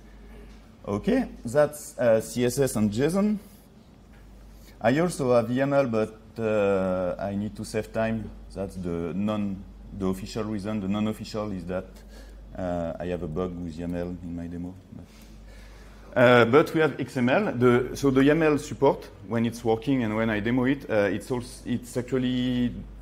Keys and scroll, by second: 13.3 ctrl+3.